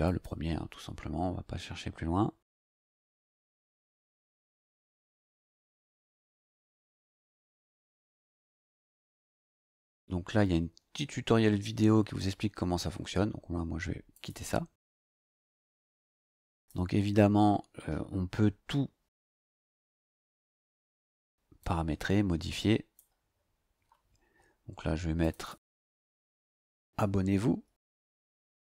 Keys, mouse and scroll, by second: 0.0 click, 14.1 click, 16.5 click, 19.5 click, 21.6-23.1 drag, 23.7 click, 25.2 click, 25.8 click, 26.9-28.7 typing.